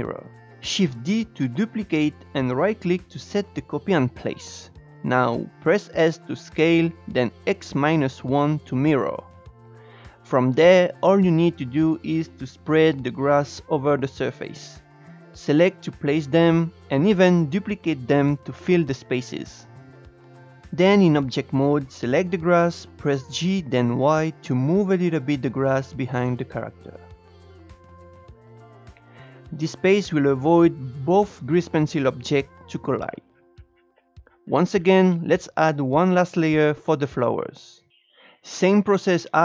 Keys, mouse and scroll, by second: 0.1 shift+d, 3.9 s, 9.4 scroll down 2, 9.5 shift+middle click, 10.1-12.5 typing, 10.5 scroll up 2, 10.7 shift+middle click, 10.9 click, 12.8 scroll down 1, 13.0-13.4 shift+middle drag, 13.4 click, 14.1 click, 14.4-15.4 typing, 16.5 shift+d, 16.8 scroll down 2, 16.9 scroll up 2, 17.1 click, 17.7 click, 18.1 click, 18.4-19.8 typing, 20.0-20.4 scroll up 2, 20.4 click, 20.9 scroll down 2, 21.2-22.2 middle drag, 22.2 scroll up 4, 22.5-23.7 middle drag, 23.7 g, 28.8-32.5 middle drag, 32.5 KP_0, 33.3-34.3 scroll up 4, 34.9-37.0 drag.